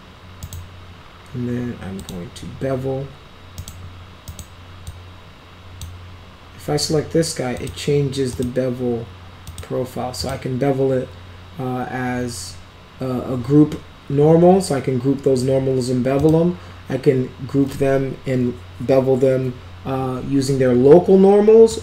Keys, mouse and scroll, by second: 0.4 right click, 1.9 click, 3.5 right click, 4.2 right click, 4.8 click, 7.5 click, 8.2 click, 9.4 click, 10.1 click, 16.1 click, 21.6 click.